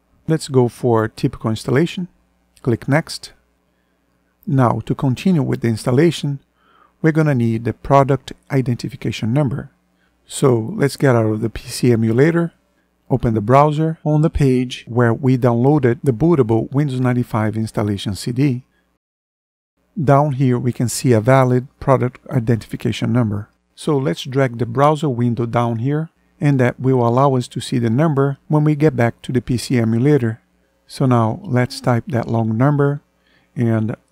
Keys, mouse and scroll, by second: 11.5 ctrl+End.